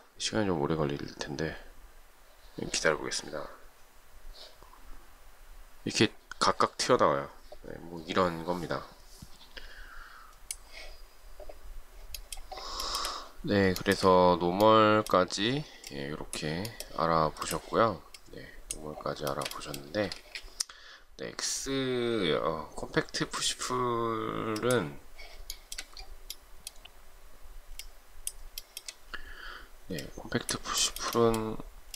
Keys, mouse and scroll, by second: 10.6 space, 12.9 shift+middle click, 13.9 shift+middle click, 19.3 shift+middle click, 20.2 space, 25.6 shift+middle click, 28.7 shift+middle click, 30.8 shift+middle click.